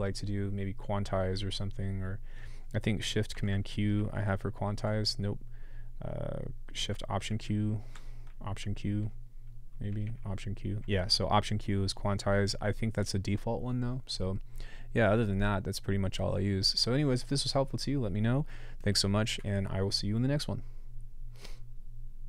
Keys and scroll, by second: 3.9 alt+super+q, 7.3 alt+shift+q, 8.6 alt+q, 10.0 alt+q.